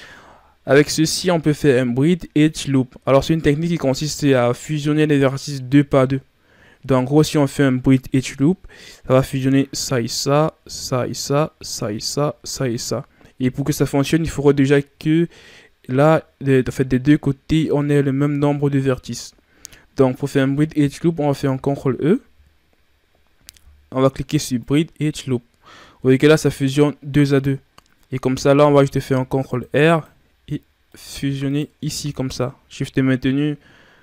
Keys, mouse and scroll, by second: 21.4 ctrl+e, 26.3-27.1 scroll down 3, 27.5-28.3 scroll up 5, 28.7 ctrl+r, 30.3-30.8 scroll up 1, 30.8 right click, 31.4 shift+right click.